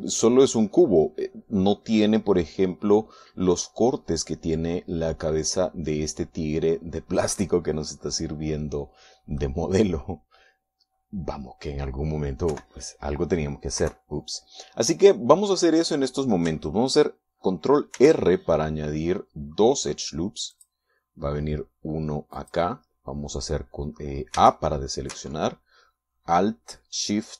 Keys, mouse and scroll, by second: 6.1-7.1 scroll up 3, 7.7 scroll down 2, 8.4-10.5 middle drag, 13.5 KP_1, 14.8 KP_3, 18.9 ctrl+r, 21.5 click, 23.4 click, 25.4 a.